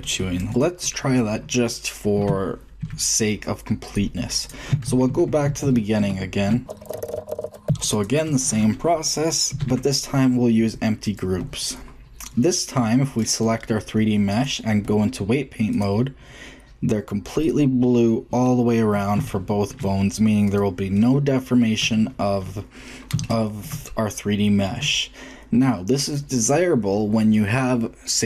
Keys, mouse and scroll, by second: 0.7 shift+middle click, 1.0 middle click, 2.1 Tab, 3.8-5.7 drag, 4.8 ctrl+z, 5.0 ctrl+z, 5.2 ctrl+z, 5.4 ctrl+z, 5.6 ctrl+z, 6.1-6.5 ctrl+z, 7.0-7.3 ctrl+z, 7.9 click, 8.7 click, 9.5 ctrl+p, 13.1-14.2 drag, 15.1 click, 16.1 click, 17.4-18.6 drag, 18.8 click, 18.9 click, 19.1 shift+click, 20.7-22.0 shift+middle drag.